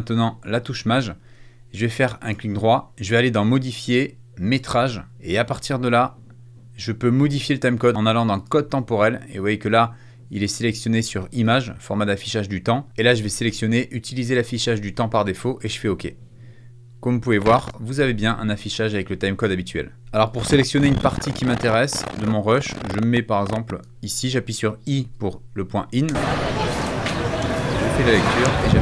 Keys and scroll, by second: 24.9 i, 25.9 space.